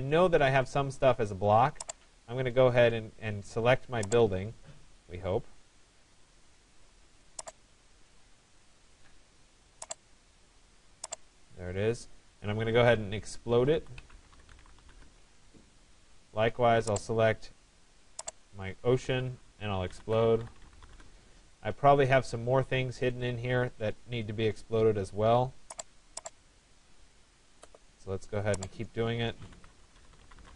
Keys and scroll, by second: 14.5 Return, 20.5 Return, 30.1 Return.